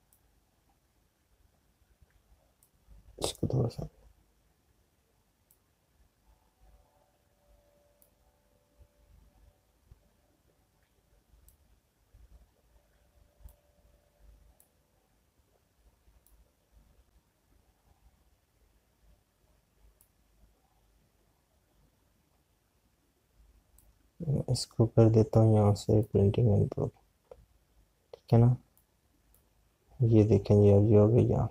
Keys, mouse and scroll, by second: 3.7 alt+click, 12.5 alt+click, 19.5 scroll down 1, 21.2 click, 24.7 click, 26.9 click, 29.6 click.